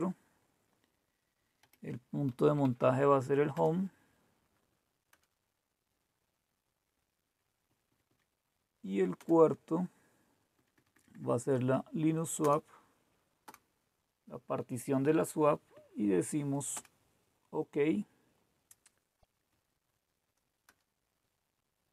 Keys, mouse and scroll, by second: 1.7-3.2 typing, 3.5 Return, 5.1 Return, 7.7 Down, 7.8 Down, 8.0 Down, 9.1 Return, 10.5 Down, 10.6 Down, 10.9 Down, 11.0 Down, 11.5 Down, 12.4 Return, 12.4 typing, 13.4 Return, 15.7 Right, 16.7 Return, 19.1 Right, 19.1 Left, 19.1 Return, 19.4 Down, 20.6 Return.